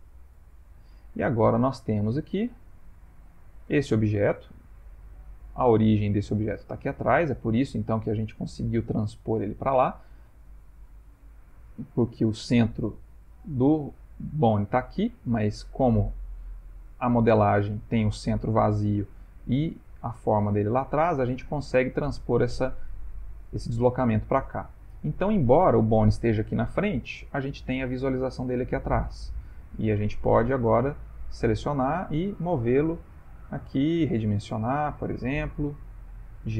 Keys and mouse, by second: 0.8 middle click, 2.2 ctrl+middle click, 3.1 ctrl+middle click, 3.8 Tab, 5.1 middle click, 5.6 g, 11.7 ctrl+middle click, 12.3 ctrl+middle click, 13.0 click, 16.2 click, 21.9 middle click, 23.0 ctrl+middle click, 23.3 shift+middle click, 24.1 ctrl+middle click, 24.2 ctrl+middle click, 24.5 shift+middle click, 24.8 shift+middle click, 25.4 ctrl+middle click, 25.5 ctrl+middle click, 27.4 click, 27.9 ctrl+middle click, 29.4 g, 34.0 s.